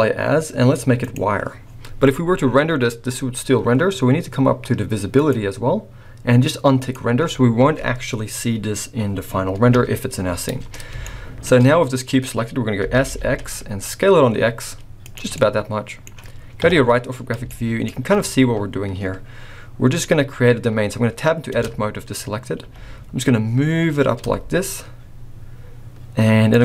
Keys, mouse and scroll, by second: 1.6-2.3 scroll up 1, 2.3-2.7 scroll up 1, 5.1 click, 6.8 click, 9.6 KP_1, 11.0 shift+middle click, 11.5-12.3 scroll up 2, 12.3-13.1 scroll down 2, 12.8 s, 15.3 middle click, 16.5 KP_3, 17.1-17.5 scroll up 4, 17.5 shift+middle click, 17.9 shift+scroll up 1, 18.6-18.9 scroll up 2, 21.5 Tab, 22.6 g.